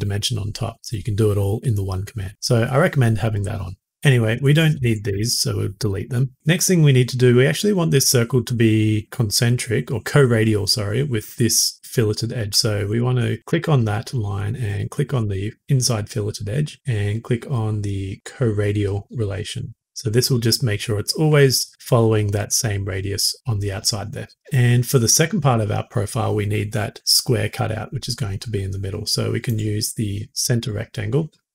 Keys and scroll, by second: 5.0 Delete.